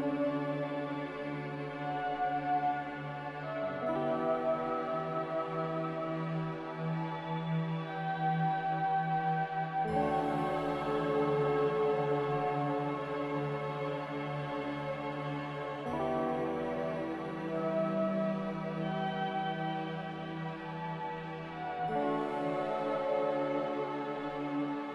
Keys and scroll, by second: 0.9 a, 19.7 ctrl+c, 22.7 ctrl+v.